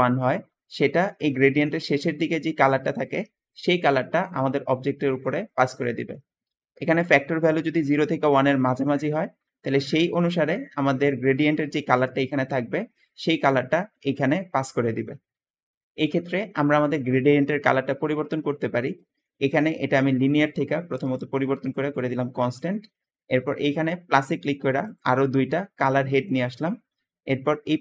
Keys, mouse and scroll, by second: 0.0 Escape, 0.8-1.8 drag, 2.2 click, 2.7 click, 6.3 Escape, 7.4 click, 16.0 Escape, 16.0 Escape, 18.2 click, 18.5 middle click, 18.5 scroll down 1, 18.6 click, 19.3 click, 27.6-27.8 drag.